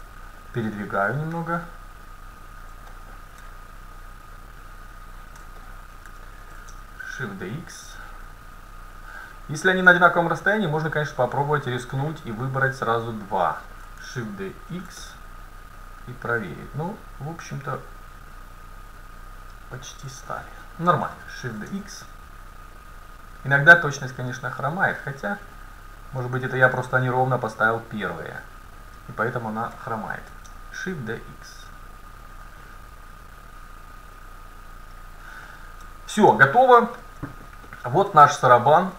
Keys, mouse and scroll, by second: 0.2-2.1 drag, 2.9 middle click, 4.0-5.8 drag, 6.5 shift+d, 7.1 middle click, 10.1-15.3 right drag, 14.7 shift+d, 20.3 middle click, 21.3 middle click, 21.5 shift+d, 26.0-29.0 drag, 30.2 shift+d, 33.2-35.2 drag, 35.5-36.4 scroll up 1, 35.9 a, 36.5 middle click, 37.1 middle click, 38.5-38.9 middle drag.